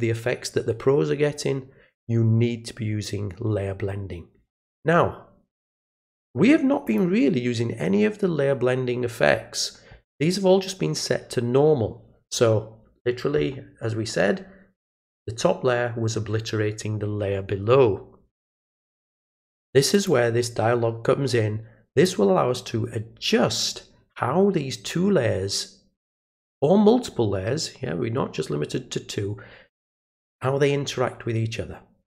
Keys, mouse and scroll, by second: 5.7 click, 6.8 click, 19.9 click, 21.9 click.